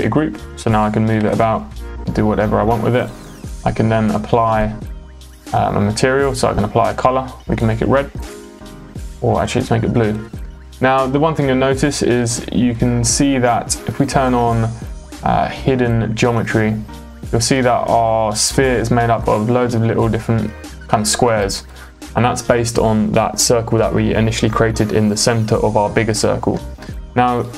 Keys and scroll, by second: 1.2 m.